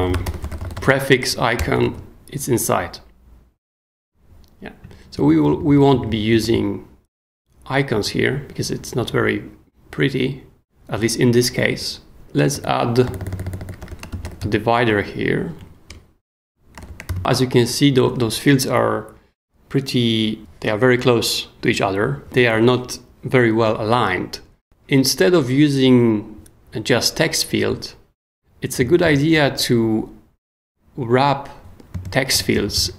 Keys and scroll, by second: 0.0-1.3 typing, 1.6 Return, 1.8 super+s, 5.5 super+k, 5.9 d, 6.4 super+s, 12.2 j, 13.6-14.9 typing, 15.6 Down, 15.9 Return, 16.7 shift+Return, 16.8 shift+0, 17.1 shift+,, 28.8 super+Escape, 29.0 k, 29.3 shift+o, 32.3-32.9 typing.